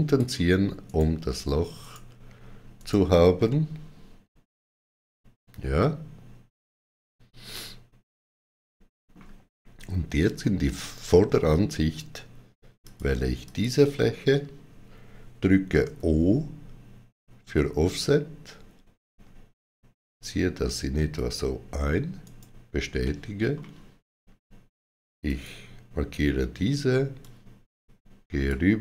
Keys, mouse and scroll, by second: 0.7 right click, 1.7 right click, 2.6 right click, 3.3 middle click, 12.6 click, 12.6 middle click, 13.3 click, 15.6 o, 18.2 click, 18.2 shift+o, 21.0 shift+click, 22.0 right click, 22.8 middle click, 25.1 click, 27.1 click.